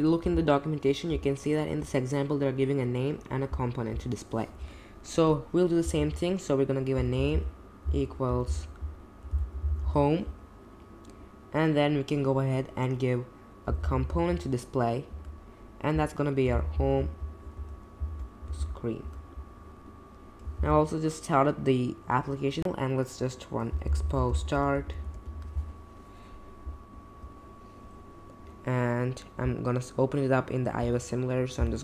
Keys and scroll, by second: 0.2 BackSpace, 4.4 BackSpace, 5.8-10.3 typing, 6.0 Left, 13.4-17.5 typing, 18.1 alt+Escape, 18.6 shift+s, 19.0 Return, 20.6 super+j, 22.6-25.6 typing, 28.9 typing, 31.5 typing.